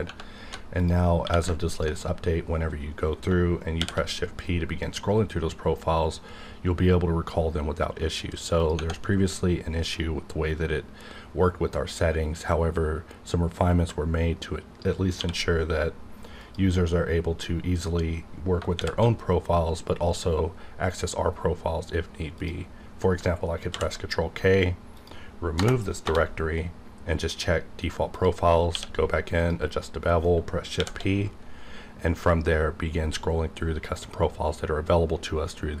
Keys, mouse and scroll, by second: 0.7 click, 0.8 click, 1.2 q, 1.7 ctrl+click, 2.4 scroll up 1, 3.8 shift+p, 4.4-5.5 scroll up 2, 5.5-6.2 scroll up 1, 6.8 scroll up 1, 8.6 click, 15.2 q, 16.4 click, 18.8 shift+p, 19.4-20.1 scroll up 1, 23.1 click, 23.7 ctrl+k, 24.9 click, 26.0 Return, 27.3 click, 28.7 q, 29.4 click, 30.7 shift+p, 31.5-32.5 scroll up 1.